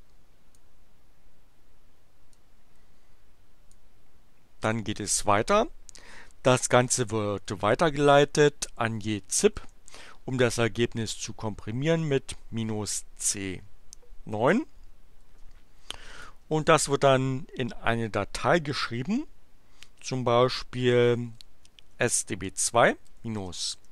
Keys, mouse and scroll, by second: 2.4-3.9 drag, 4.7 click, 6.7 space, 7.6 alt+<, 8.1 alt+space, 8.6-10.1 typing, 11.1 space, 11.6 -, 12.0 c, 13.5 9, 15.2 space, 16.6 shift+<, 19.9-23.9 typing.